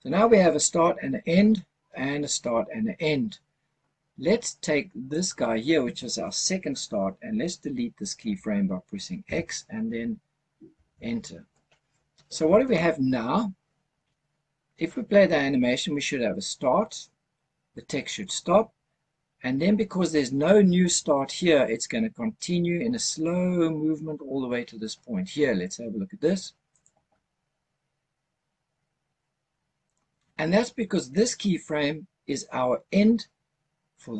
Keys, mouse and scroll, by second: 5.0 click, 9.1 x, 26.7 click, 29.7 click, 31.0 click.